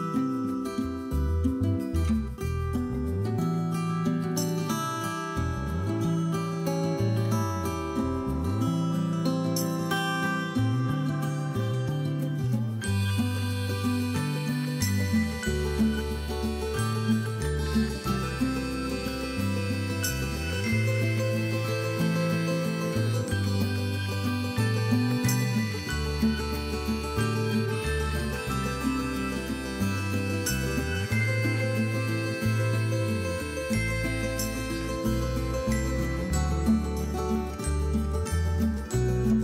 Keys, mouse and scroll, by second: 0.2 click, 0.3 scroll down 2, 0.3-0.8 middle drag, 0.8-1.5 scroll up 4, 1.1-3.0 middle drag, 1.5 scroll down 2, 1.9 scroll up 2, 3.0 click, 3.6 click, 4.2 scroll down 1, 4.3-4.9 middle drag, 4.9 scroll up 1, 5.2 scroll down 1, 5.2-8.7 middle drag, 7.2-7.5 scroll up 1, 8.7 click, 8.7-9.8 middle drag, 9.8-10.4 right drag, 10.4-12.3 middle drag, 11.8 g, 12.3 right click, 12.5 middle click, 12.7 click, 12.9-14.1 middle drag, 14.2 ctrl+z, 14.4 ctrl+z, 14.9 click, 15.2 middle click, 15.7 KP_3, 16.1 click, 16.3 scroll up 1, 16.6 c, 16.8 right click, 17.2 g, 19.1 click, 19.2-19.6 scroll down 1, 19.6 shift+middle click, 19.7 scroll up 1, 19.9 shift+middle click, 20.0 scroll down 1, 20.1 shift+middle click, 20.5 drag, 20.5 c, 20.7 right click, 20.9-22.6 drag, 20.9 g, 22.7 scroll down 1, 22.9 scroll up 1, 23.0-24.1 drag, 24.3 scroll up 1, 24.5-25.0 scroll down 2, 24.6 middle click, 25.0 KP_1, 25.5 click, 25.8 scroll up 1, 26.1 scroll down 1, 26.2 shift+middle click, 26.7-27.1 scroll down 2, 26.8 middle click, 27.1 middle click, 27.4 scroll up 1, 27.6 middle click, 27.9 click, 28.2 KP_1, 28.4-29.3 scroll up 1, 29.8 scroll up 1, 29.9 middle click, 30.0-30.5 scroll down 2, 30.1 middle click, 30.5 middle click, 31.6 click, 31.7 middle click, 32.1 click, 32.6 middle click, 33.2 shift+click, 34.1 g, 36.1-37.2 shift+drag, 37.2 g, 37.7-39.4 shift+drag.